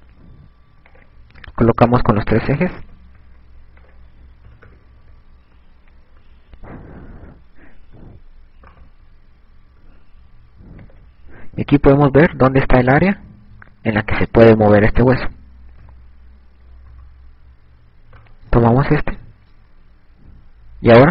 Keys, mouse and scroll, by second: 0.1 click, 2.3 click, 5.1 click, 9.2 a, 10.3 right click, 12.1 click, 12.7 KP_6, 14.5 KP_6, 16.9 KP_1, 17.7 KP_3, 18.7 right click, 20.7 g.